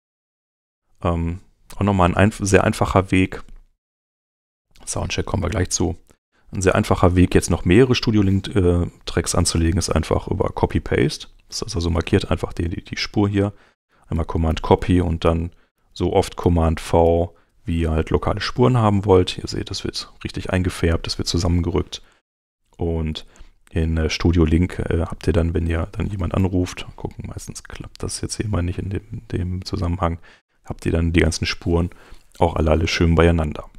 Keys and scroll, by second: 0.6 super+Tab, 14.5 super+c, 15.2 super+v, 22.2 super+Tab, 25.7-27.1 typing, 30.3 super+Tab.